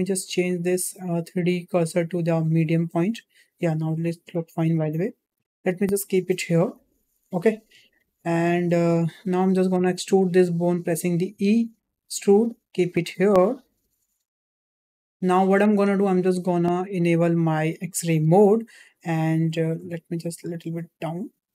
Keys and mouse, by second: 0.2-2.5 drag, 3.8 s, 5.3 g, 8.0 shift+middle click, 9.7 Tab, 10.6 click, 11.2 e, 18.2 click, 19.7 g.